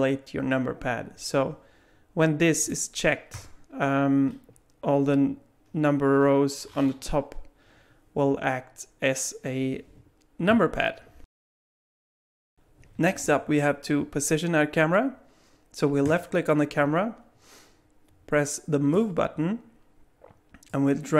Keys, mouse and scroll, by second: 16.0 click, 18.9 click, 20.7 click.